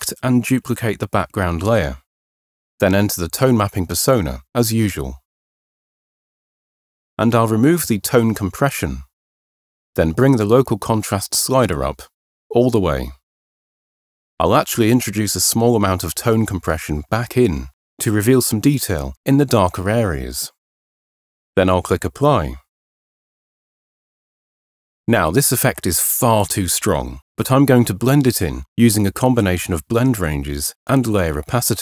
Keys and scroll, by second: 0.0 super+j, 24.7 super+0.